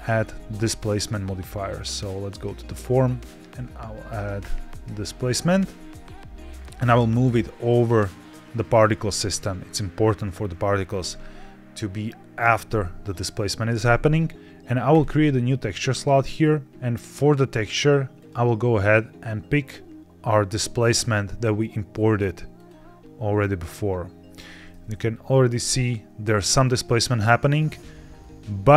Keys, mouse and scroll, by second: 7.1-8.7 drag, 14.8 click, 16.6-22.9 drag, 24.6-27.6 middle drag, 27.6-28.4 scroll up 4, 28.4 scroll down 2.